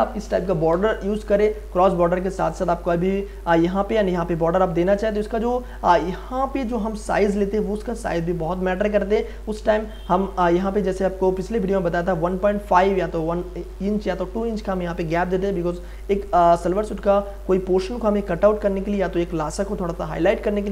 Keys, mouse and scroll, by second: 0.7 m, 2.4 space, 2.7-4.5 ctrl+drag, 4.5 ctrl+click, 5.0 click, 6.0 click, 7.3-11.4 drag, 11.3 ctrl+d, 12.3-20.7 drag.